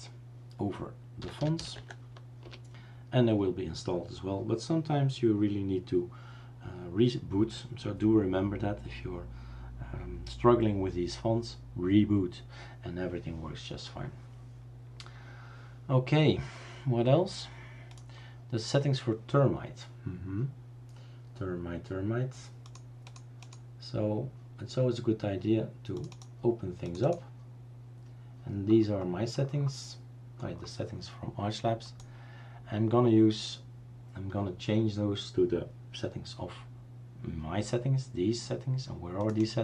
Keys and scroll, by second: 1.0-2.0 typing, 2.4 Return.